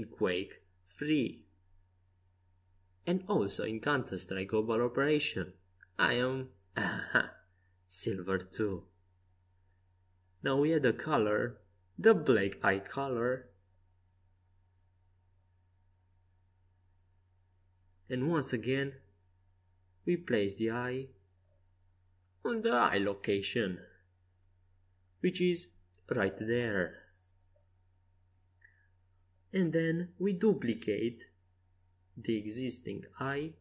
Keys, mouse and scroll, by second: 0.3 click, 0.4 z, 2.8-9.8 drag, 9.8-10.9 middle drag, 11.6 z, 13.5-15.4 right drag, 16.0 Tab, 16.6 Tab, 17.3 z, 18.2-19.8 drag, 19.8 right click, 20.4 g, 27.9-30.1 middle drag, 33.3 shift+d.